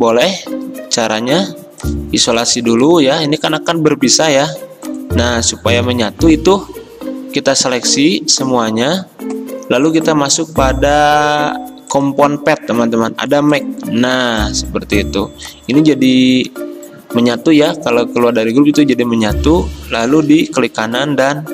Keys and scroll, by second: 3.4 ctrl+a, 5.8 ctrl+z, 6.7 ctrl+a, 8.8 ctrl+z, 16.2 ctrl+z, 17.1 Escape, 18.5 ctrl+z.